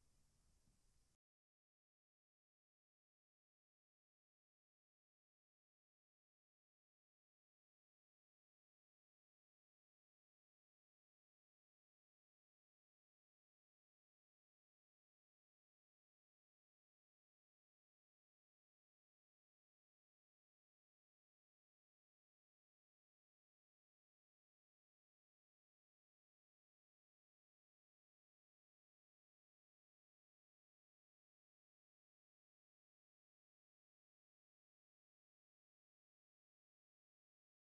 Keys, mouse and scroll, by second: 1.6 click, 2.7 shift+a, 5.2 click, 6.8 click, 7.8 click, 8.6-9.7 drag, 10.5-12.2 drag, 12.4-13.8 drag, 14.5 click, 16.9 click, 18.6 click, 20.1-21.1 drag, 21.6 scroll down 2, 22.1 scroll up 1, 22.5-22.9 scroll down 1, 23.7 click, 24.5 scroll up 2, 25.3 shift+middle click, 26.7 click, 27.7 scroll down 3, 28.0 scroll up 2, 28.1-28.8 middle drag, 29.1-29.7 middle drag, 30.0-30.5 scroll up 2, 30.9-32.0 shift+middle drag, 31.5 click, 32.8-34.0 drag, 33.0 scroll down 2, 34.4 click, 36.0-36.8 drag, 36.2-36.6 typing.